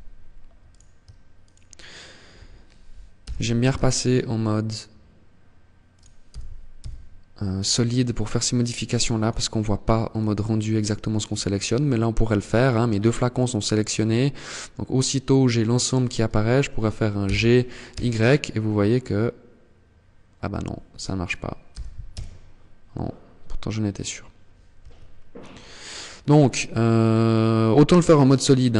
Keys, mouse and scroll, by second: 0.5 shift+right click, 2.2 g, 5.2 click, 5.4 g, 7.4 click, 8.2 click, 16.1 g.